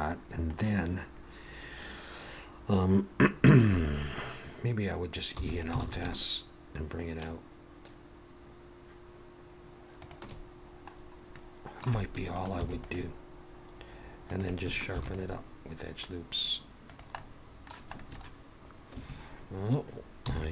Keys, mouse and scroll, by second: 5.4 e, 5.8 alt+s, 10.9-11.4 scroll up 1, 11.4 middle click, 12.6 ctrl+r, 15.0 ctrl+r, 17.2 middle click.